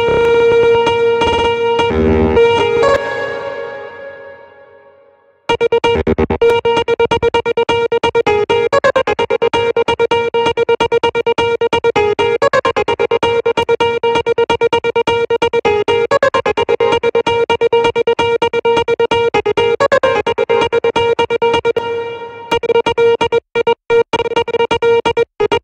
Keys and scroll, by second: 2.3 space, 5.0 space, 21.2 space.